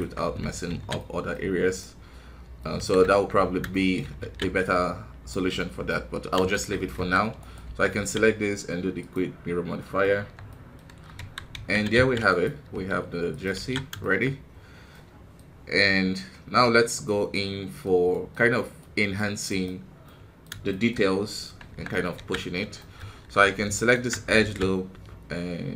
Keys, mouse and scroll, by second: 0.9 middle click, 1.3 scroll up 1, 1.7 middle click, 2.7 KP_1, 3.0 Tab, 3.6 shift+middle click, 4.1 alt+a, 4.9 scroll down 2, 5.2-6.9 middle drag, 6.9 KP_1, 7.3 right click, 7.6 Tab, 8.9 click, 9.8 middle click, 10.1 Tab, 10.4 middle click, 11.1 KP_1, 11.5 a, 13.9 shift+middle click, 14.3-14.9 scroll up 2, 14.9 middle click, 15.7-16.1 scroll down 1, 16.1 middle click, 16.9-17.3 scroll up 2, 17.3-18.3 middle drag, 18.3 scroll up 1, 18.7-20.9 middle drag, 20.9 scroll up 2, 21.6 Tab, 22.4-22.7 scroll up 1, 22.7 shift+middle click, 23.0 scroll up 3, 23.7 alt+right click, 24.3 alt+s.